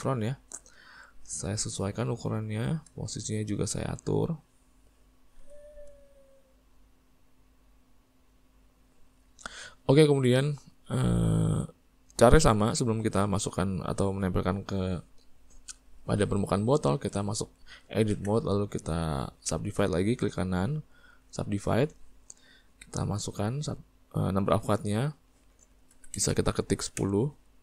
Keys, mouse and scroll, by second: 1.7 s, 4.0 click, 5.5 s, 7.1 click, 8.7-11.6 middle drag, 11.6 click, 13.2-16.6 middle drag, 18.2 Tab, 21.7-27.1 right drag, 27.1-27.6 drag.